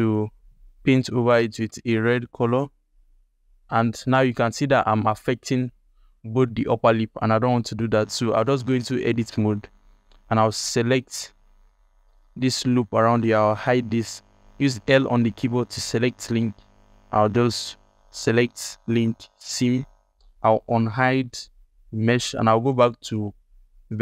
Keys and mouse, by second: 0.7 x, 1.0 f, 1.5 f, 1.9-3.3 drag, 3.6 alt+click, 7.3 ctrl+z, 7.5 click, 8.2 Tab, 8.7 alt+click, 9.1 ctrl+alt+click, 10.8 click, 11.0 click, 11.4 ctrl+click, 12.6 ctrl+alt+click, 13.4 h, 14.7 l, 16.0 click, 16.4 l, 20.6 alt+h, 22.2 ctrl+Tab.